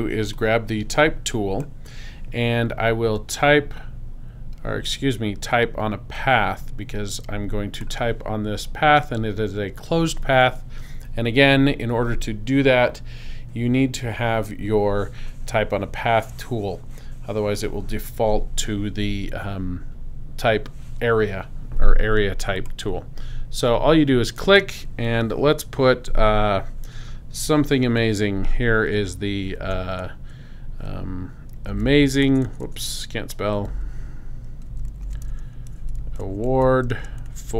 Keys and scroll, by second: 29.6 shift+a, 31.3-37.5 typing.